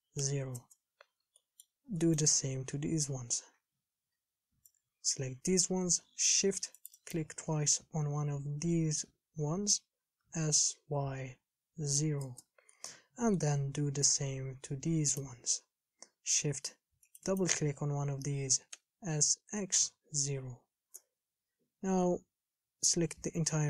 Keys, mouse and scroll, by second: 1.6 shift+middle click, 2.6 a, 5.8 b, 7.2 shift+click, 10.9 s, 13.1 shift+middle click, 13.8 a, 15.4 click, 17.5 shift+click, 18.9 s, 22.7 a, 23.2 a.